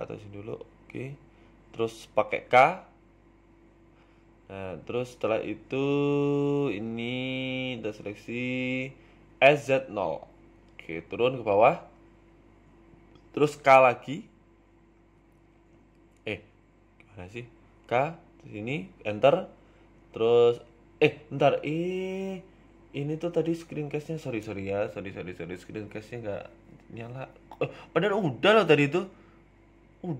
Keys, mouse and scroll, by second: 21.7 click, 22.1 click, 22.6 n, 23.7 click, 24.5 s, 26.2 click, 27.4 g, 29.1 ctrl+r.